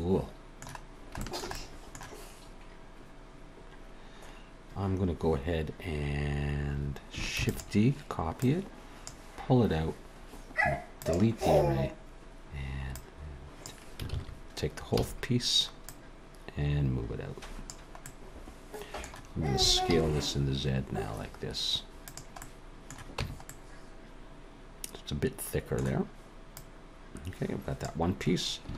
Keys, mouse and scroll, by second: 0.9 scroll down 1, 1.2 shift+middle click, 1.5 middle click, 7.4 shift+d, 8.4 click, 11.0 click, 12.9 Tab, 12.9 click, 14.1 ctrl+z, 15.0 a, 15.8 click, 18.0 middle click, 19.6 s, 22.4 middle click, 23.2 Tab, 23.5 middle click, 26.5 click.